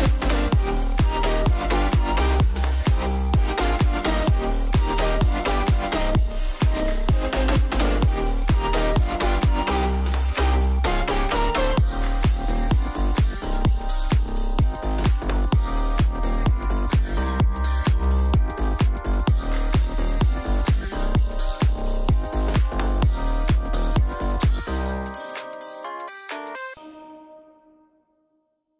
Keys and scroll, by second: 13.9 super+-, 15.9 shift+super+2, 22.1 shift+super+2, 23.5 alt+shift+Down, 24.3 alt+Down, 25.9 alt+Down.